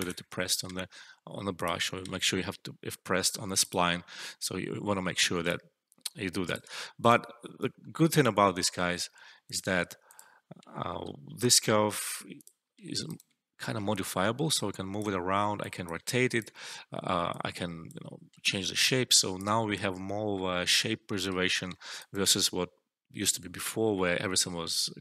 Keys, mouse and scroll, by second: 0.6 e, 1.5 click, 1.9 e, 3.5 click, 5.1 alt+middle click, 5.4-6.6 alt+drag, 7.6 alt+middle click, 9.4 click, 10.6 alt+middle click, 12.2 click, 12.3 click, 12.7 alt+middle click, 12.9 alt+right click, 14.4-15.1 click, 15.9-16.6 alt+drag, 18.3-19.5 alt+click, 19.6 alt+middle click, 21.9 alt+right click.